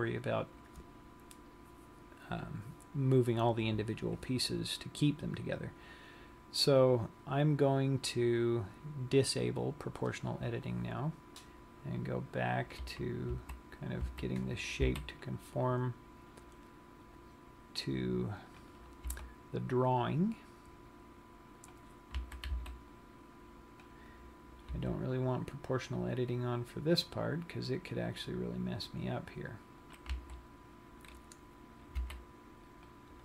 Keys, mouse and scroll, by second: 7.3 click, 13.9 a, 14.9 a, 15.6 c, 18.8 c, 19.5 right click, 19.6 g, 22.4 click, 22.6 a, 23.1 c, 25.5 g, 30.5 click, 30.9 a, 31.7-32.5 scroll up 4, 32.5 c.